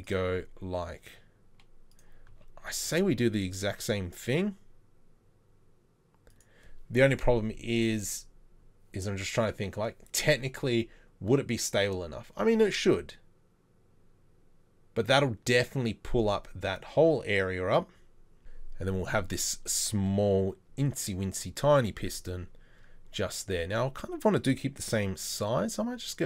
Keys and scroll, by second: 2.3 g, 2.9 r, 3.8 g.